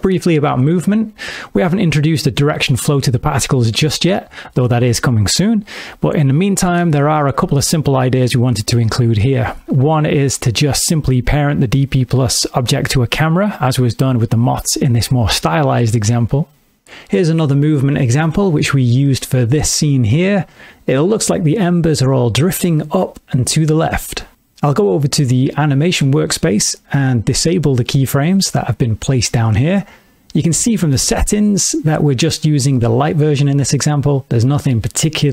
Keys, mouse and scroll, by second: 0.1 shift+middle click, 4.7 middle click, 5.9 shift+middle click, 10.0 middle click, 10.6 shift+middle click, 26.9 click, 29.3 click, 30.2 click, 30.2 space, 30.9 click, 32.0 click, 34.6 middle click.